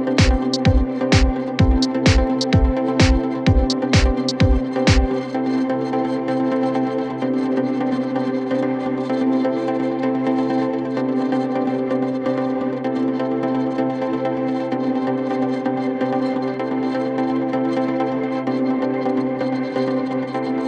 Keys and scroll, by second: 14.0 c, 14.4 Escape, 14.7 F3, 15.6 Escape, 19.9 shift+F2, 20.1 Escape.